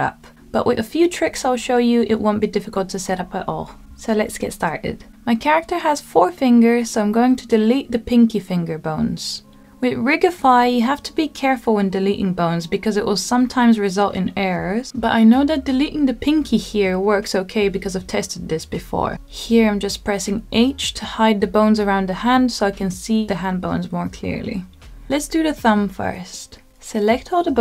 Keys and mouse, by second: 3.2 middle click, 4.2 click, 5.8-6.9 drag, 7.9 middle click, 15.6 Delete, 18.6 middle click, 20.3 h, 21.4 h, 22.6 middle click, 23.7 shift+middle click, 24.7 h, 26.2 click.